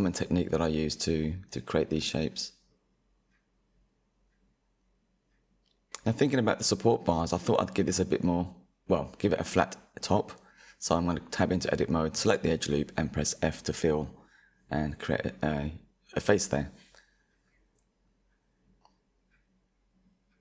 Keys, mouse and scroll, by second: 0.0-0.5 scroll down 4, 0.5-2.8 shift+middle drag, 2.8-3.3 scroll up 5, 3.3-4.2 shift+middle drag, 4.2-4.6 scroll up 1, 4.6 click, 5.2 Tab, 5.9 2, 7.0 alt+click, 10.7 f, 13.3 Tab, 13.7 click, 14.0-14.9 scroll down 4, 14.9 KP_1, 17.9-19.0 middle drag, 19.0-19.3 scroll down 3, 19.3-20.4 shift+middle drag.